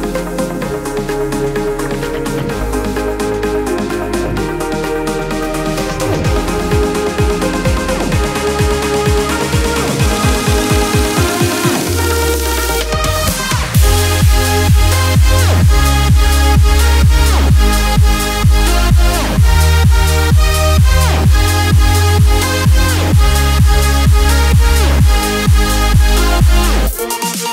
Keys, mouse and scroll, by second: 2.9 click, 3.7 alt+scroll up 1, 6.5-13.3 drag, 13.6 click, 18.4 y, 21.5-22.3 typing, 22.0-26.5 drag, 26.5-27.5 drag.